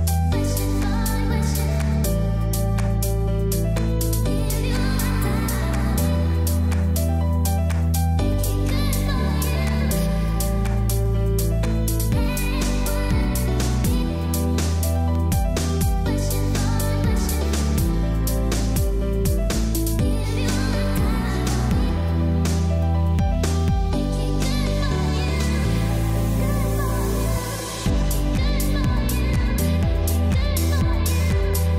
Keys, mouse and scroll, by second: 2.5 click, 9.8-10.4 scroll down 1, 10.8-11.7 scroll up 1, 11.7 scroll down 1, 12.0-12.4 scroll up 1, 12.7-13.3 scroll down 1, 13.3-13.6 scroll up 1, 14.0-14.7 scroll down 1, 14.7 scroll up 1, 15.8-16.3 scroll up 1, 17.4 click, 22.3 x, 22.4 click, 23.4 x, 23.6 click, 24.7 x, 24.9 click, 25.4 x, 25.5 click, 26.7 z, 26.8 click, 28.8 b, 29.2 click, 29.9 typing, 30.9 click, 31.6-31.7 typing.